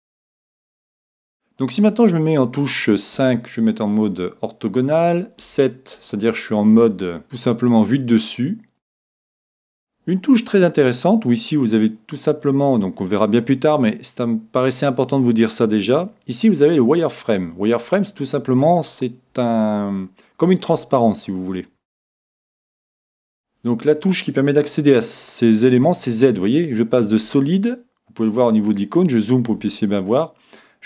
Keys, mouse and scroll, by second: 0.8-3.7 middle drag, 7.2-8.9 drag, 12.3-16.3 drag, 25.8 z, 27.1 z, 28.4 z.